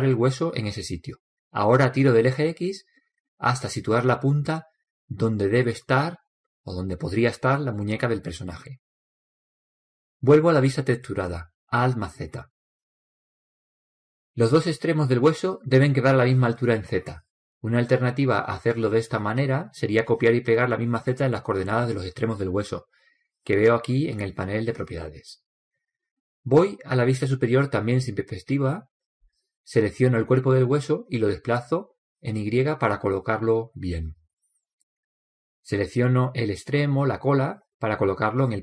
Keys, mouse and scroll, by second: 2.6 click, 11.6 alt+z, 22.8-24.8 right drag, 29.4 KP_7, 31.8 click, 38.3-38.6 right drag.